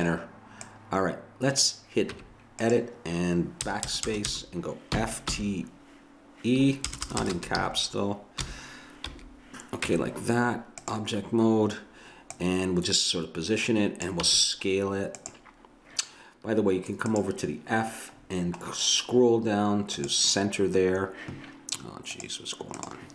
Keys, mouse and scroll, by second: 2.1 Tab, 3.7-5.3 typing, 6.9-7.2 BackSpace, 7.6 f, 8.4 t, 9.1 e, 9.9 Tab, 14.3 s, 17.1-19.0 drag, 20.0-21.8 drag, 22.2-23.1 drag.